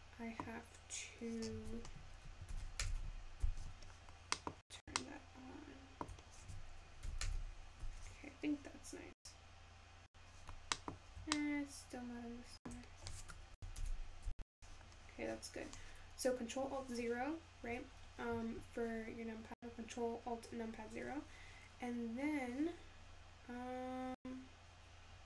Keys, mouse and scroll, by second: 0.3-9.8 middle drag, 9.8 ctrl+alt+KP_0.